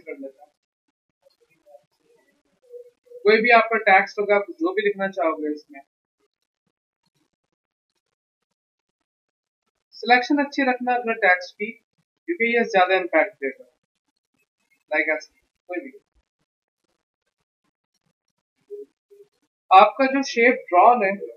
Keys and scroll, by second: 2.4 t, 3.4 BackSpace, 3.7 BackSpace, 5.9 Escape.